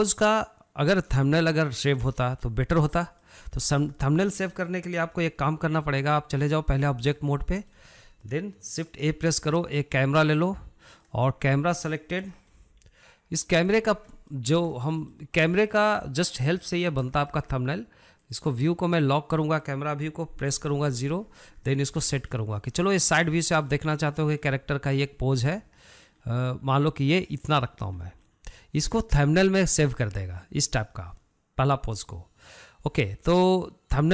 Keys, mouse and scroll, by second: 3.8 scroll down 1, 4.0-6.4 shift+middle drag, 6.4-7.8 drag, 7.8 scroll down 1, 8.0-9.4 middle drag, 9.4 shift+a, 11.0 scroll down 1, 11.3-11.7 middle drag, 11.7 scroll up 3, 11.9-13.1 shift+middle drag, 13.1 g, 14.3 scroll down 2, 14.5 middle click, 14.9 scroll up 1, 15.1-18.6 shift+middle drag, 18.6 click, 19.4 click, 19.8-20.9 shift+middle drag, 20.9 KP_0, 21.4 scroll up 1, 21.6-22.4 scroll down 10, 22.4-24.6 shift+middle drag, 24.6 scroll up 1, 24.9 shift+middle click, 25.5-26.1 scroll up 1, 26.1 shift+middle click, 26.6-27.1 scroll up 2, 27.1-31.4 shift+middle drag.